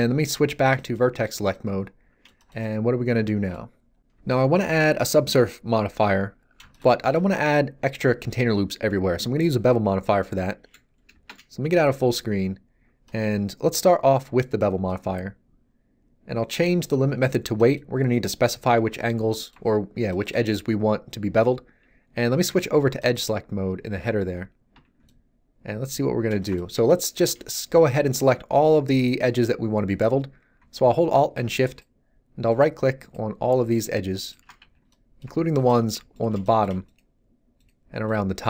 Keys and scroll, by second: 11.1 shift+space, 24.7 a, 34.6 z.